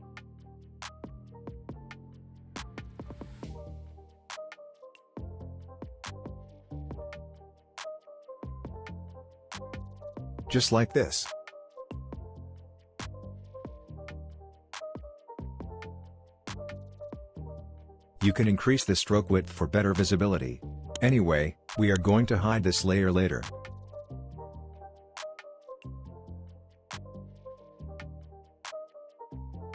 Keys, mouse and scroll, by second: 0.6-2.5 drag, 2.6 click, 3.0 space, 3.3 click, 3.4 space, 3.6 click, 3.9 space, 4.2 ctrl+z, 4.6-5.2 drag, 5.9-6.3 alt+drag, 8.0 space, 8.1 click, 8.8 ctrl+z, 9.2 drag, 12.2-12.9 alt+scroll down 1, 13.6-14.3 alt+scroll up 2, 15.1-17.1 drag, 17.2-18.8 drag, 21.4 scroll up 2, 21.5-22.3 click, 22.7 scroll up 2, 22.9 click, 26.8 click.